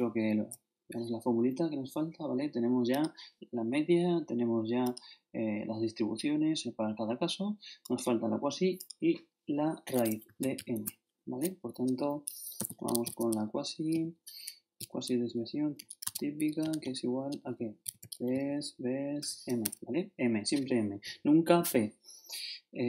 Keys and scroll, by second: 10.4 ctrl+shift+Left, 12.3-18.8 typing, 16.0 shift+Tab, 19.6 shift+Tab.